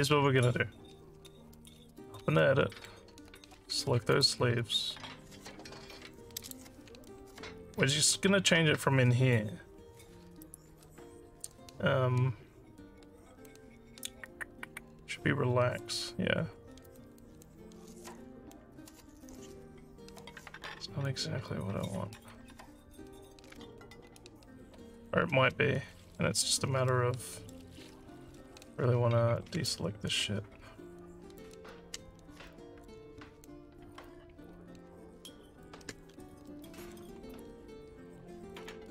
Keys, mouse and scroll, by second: 0.5 Tab, 2.4 alt+middle click, 4.1 click, 6.4 click, 7.0-8.0 alt+middle drag, 10.4 right click, 16.9 click, 24.2 ctrl+z, 26.9 alt+middle click, 29.7-31.4 ctrl+drag, 32.5 alt+middle click, 34.0-35.6 ctrl+drag, 36.5 alt+middle click, 37.3 right click, 38.6 click.